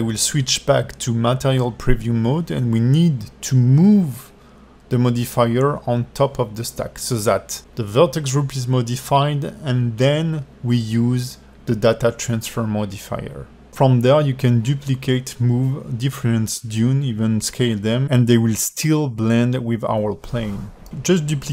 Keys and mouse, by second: 0.1-1.6 middle drag, 1.6-2.8 alt+drag, 3.8-5.2 drag, 5.8 alt+drag, 7.2-9.6 alt+middle drag, 10.2 shift+d, 11.9 s, 12.8 g, 13.3 alt+click, 14.3 g, 15.4-17.2 alt+drag, 17.7 Tab, 18.3-20.3 middle drag, 20.9-21.5 typing, 21.3-21.5 middle drag.